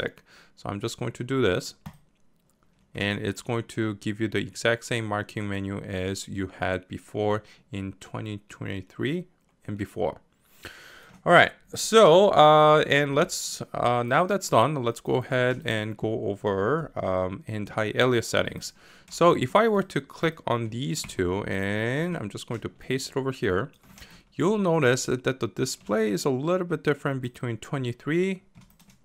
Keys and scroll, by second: 21.1 ctrl+c, 21.9 ctrl+v.